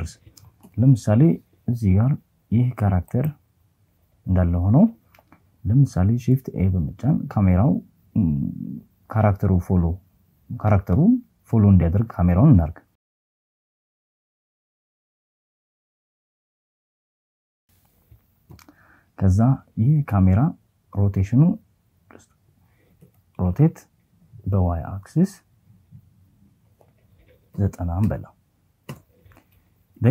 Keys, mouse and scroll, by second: 3.2 shift+a, 15.8 KP_1, 20.4 r, 21.5 y, 25.6 KP_9, 26.1 KP_0, 27.0 KP_Enter, 27.9 g.